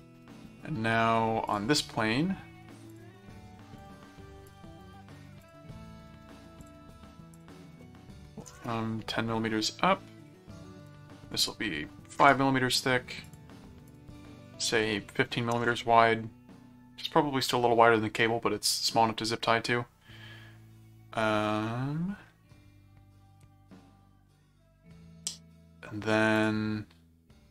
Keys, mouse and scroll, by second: 1.5 click, 2.9 click, 3.8 click, 4.5 click, 4.8 right click, 5.4 click, 6.6 click, 7.3 click, 10.2 click, 10.9 click, 13.2 click, 13.9 click, 26.3 click.